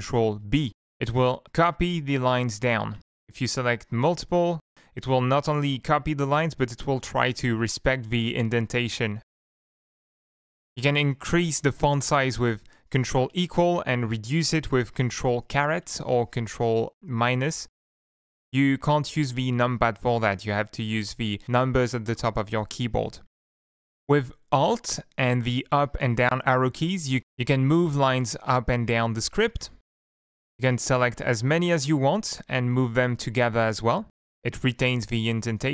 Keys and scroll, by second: 0.5 ctrl+b, 3.0 shift+Up, 3.3 shift+Home, 5.6 ctrl+b, 9.9 ctrl+=, 13.3 ctrl+=, 15.7 ctrl+-, 23.5 Left, 24.2 Up, 25.7 alt+Down, 26.0 alt+Up, 26.4 alt+Up, 26.8 alt+Down, 27.6 alt+Up, 28.3 alt+Down, 28.7 alt+Down, 29.1 alt+Up, 30.0 alt+Up, 30.0 alt+Down, 30.6 shift+Down, 31.8 Left, 32.1 shift+Down, 32.5 alt+Up, 32.9 alt+Up, 33.4 alt+Down, 33.6 alt+Down.